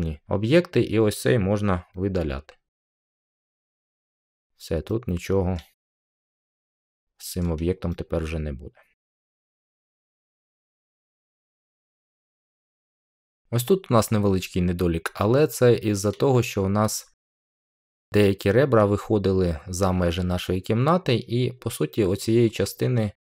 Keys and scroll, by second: 2.7 Delete.